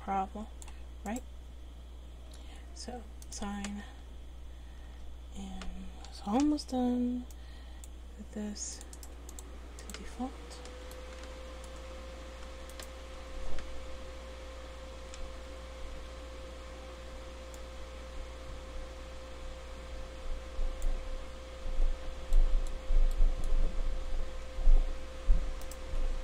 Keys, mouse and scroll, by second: 1.2-3.2 right drag, 3.2 click, 3.9 Tab, 5.1 Tab, 6.1 a, 6.4 c, 9.0 right click, 10.5 Tab, 10.9-11.9 drag, 11.9 c, 12.9 right click, 13.1 Tab, 14.0 a.